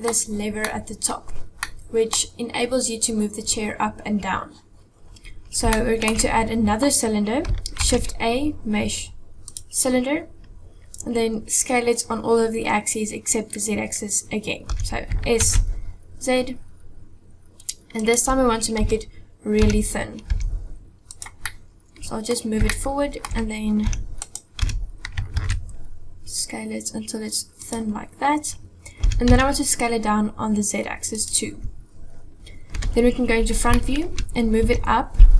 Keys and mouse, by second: 0.7 middle click, 1.8 middle click, 5.7 shift+middle click, 7.8 shift+a, 14.6 s, 18.8 KP_7, 19.5 g, 21.5-22.3 drag, 22.7-23.2 shift+drag, 23.9 g, 24.6 s, 29.1 s, 31.2 s, 32.8 KP_1, 33.7-34.1 shift+drag, 34.6 g.